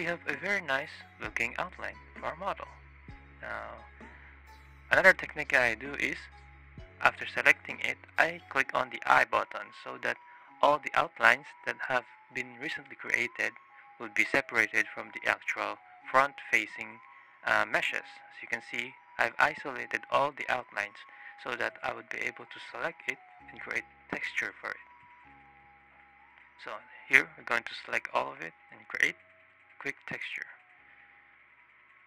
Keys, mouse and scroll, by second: 0.1-0.6 shift+drag, 1.8 shift+click, 2.2 shift+click, 2.7 drag, 8.4 click, 12.1 click, 12.6 drag, 14.7 click, 15.3 click, 15.7 drag, 16.1-17.5 drag, 17.7 drag, 18.1-18.9 drag, 19.3-19.7 drag, 19.8 click, 20.9 click, 22.4 click, 24.7 click, 25.2 shift+click, 25.6 click, 26.3-27.7 ctrl+drag, 28.7 click, 30.9 click, 31.3 click, 31.9 click.